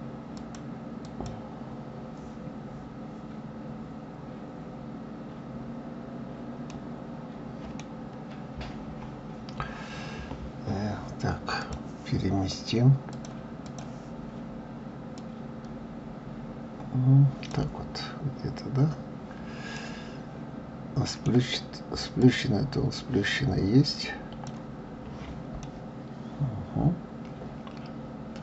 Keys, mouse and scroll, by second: 0.3 click, 2.4 scroll down 3, 6.7-8.6 middle drag, 8.6 KP_1, 11.6 click, 13.1-15.5 drag, 18.5-19.7 scroll up 3, 19.7-22.2 middle drag, 22.2 click, 25.6-28.4 middle drag.